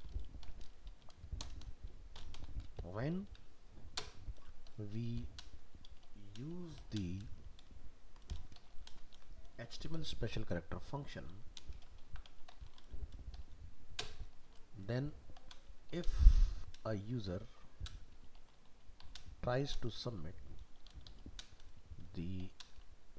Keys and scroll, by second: 9.1 ctrl+v.